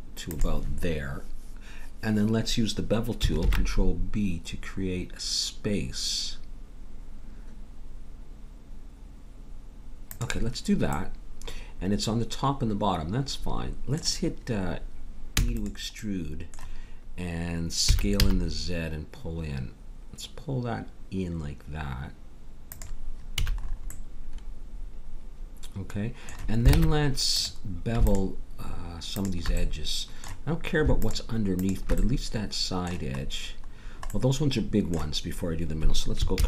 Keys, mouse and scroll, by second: 3.4 ctrl+b, 10.9 middle click, 15.3 e, 17.9 s, 23.3 a, 23.7 middle click, 24.2-26.0 middle drag, 26.7 ctrl+Tab, 28.1-29.6 drag, 29.6-30.9 middle drag, 29.8-30.9 drag, 31.6-33.8 drag, 32.0-33.2 middle drag, 34.3 middle click, 36.3 ctrl+b.